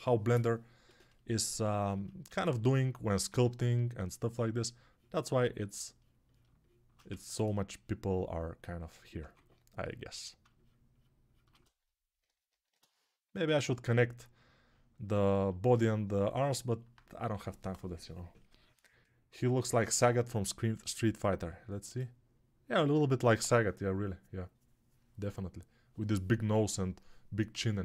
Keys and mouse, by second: 2.5 alt+q, 3.1 2, 6.1-27.8 shift+drag, 6.9 1, 9.0 2.